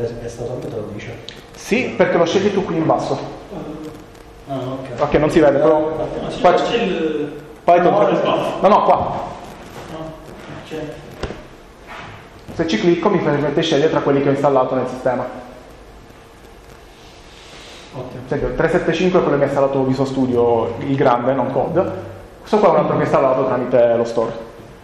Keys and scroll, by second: 14.8 Down, 15.5 Up, 22.2 Down.